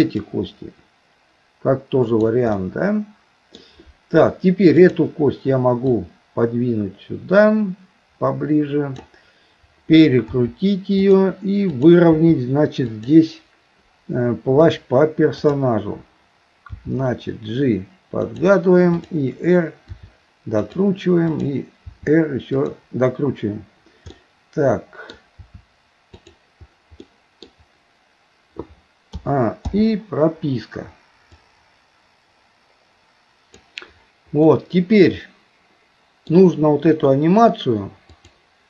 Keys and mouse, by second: 0.4-2.4 drag, 2.6-3.6 middle drag, 4.9 click, 6.0-9.0 drag, 10.3 r, 11.7 click, 12.2 r, 15.4 click, 16.7 g, 18.9 click, 19.9 r, 21.9 r, 24.2-25.2 middle drag, 25.4 r, 27.0 middle click, 29.2 a, 29.7 i, 31.4-33.7 drag, 34.5-36.3 middle drag, 38.2 click.